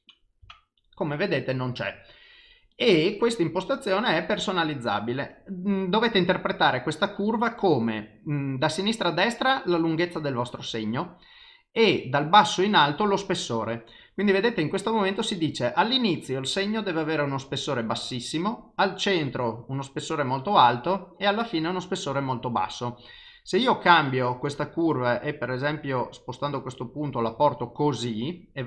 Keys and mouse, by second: 2.8 click, 3.5 click.